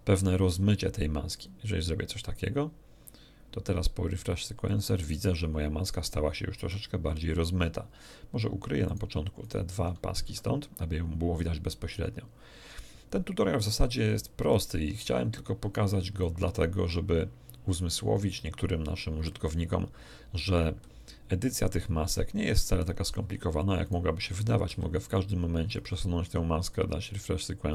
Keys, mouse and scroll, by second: 1.4 click, 4.2 click, 8.8 right click, 9.4 shift+right click, 10.2 shift+h, 16.2-17.9 shift+middle drag, 23.8 right click, 24.6 g, 25.6 click, 27.0 click.